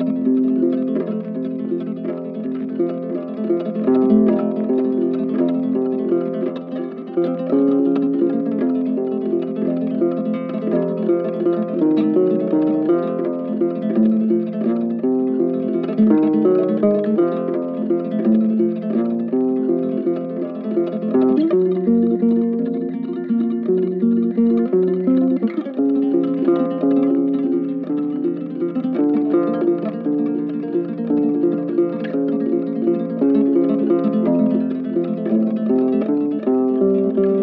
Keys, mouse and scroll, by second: 7.3 double click, 28.6 shift+click, 29.5 shift+click.